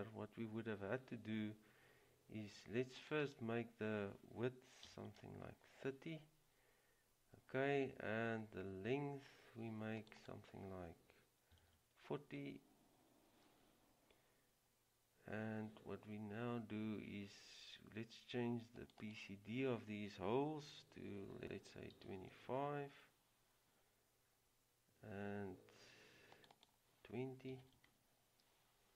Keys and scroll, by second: 5.0 typing, 6.2 typing, 11.7 typing, 22.1 typing, 24.3 typing, 27.4-28.3 typing.